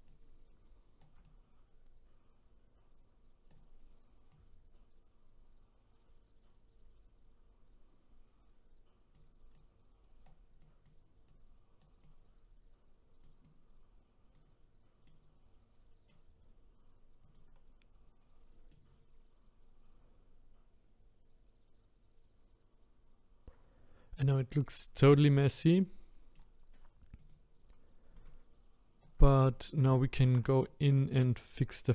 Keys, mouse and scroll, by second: 0.1-4.3 shift+right drag, 4.3-7.3 drag, 9.6-10.6 right drag, 10.6 click, 11.3 right click, 12.0-15.0 drag, 15.0-17.3 middle drag, 17.3 click, 18.7-21.8 middle drag, 25.0-27.3 middle drag, 27.3 click, 28.3-31.9 shift+right drag.